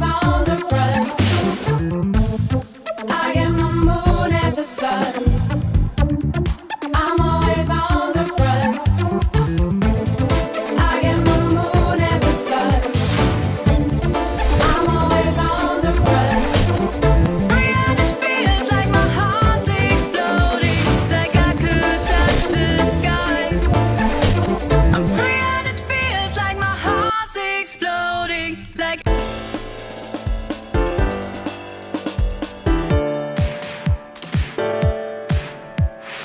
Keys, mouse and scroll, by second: 1.6 click, 3.5 scroll up 2, 3.6 click, 4.1 Delete, 5.9-6.9 drag, 9.0 click, 10.3 click, 11.8-12.4 drag, 15.0 ctrl+click, 19.7 Escape, 21.1 click, 24.4 click, 24.5 click, 26.5 click, 27.8-29.3 typing, 32.4 drag, 33.1-33.5 drag, 33.7 click.